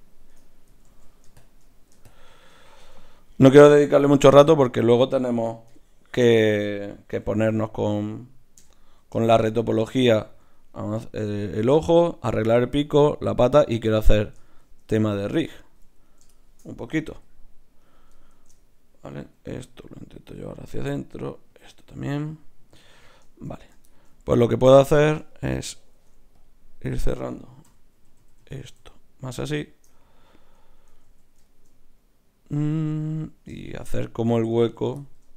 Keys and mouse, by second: 0.8 ctrl+z, 2.8 Tab, 4.2 g, 5.7 KP_Divide, 7.2 g, 8.6 KP_Divide, 16.0-17.1 right drag, 17.1 g, 18.3 shift+Tab, 19.2 g, 20.4 click, 20.9 g, 21.9 click, 21.9 right click, 25.8 ctrl+Tab, 26.9-28.8 drag, 27.6-28.8 typing, 31.0 ctrl+z, 34.6-35.3 right drag.